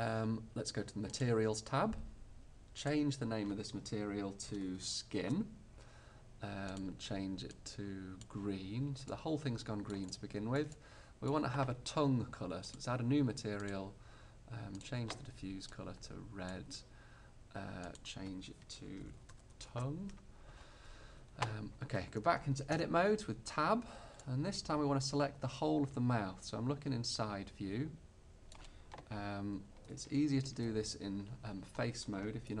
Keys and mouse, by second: 4.8-6.8 middle drag, 8.8 middle click, 12.7-16.9 drag, 19.6 click, 22.8 Tab, 30.5 ctrl+f.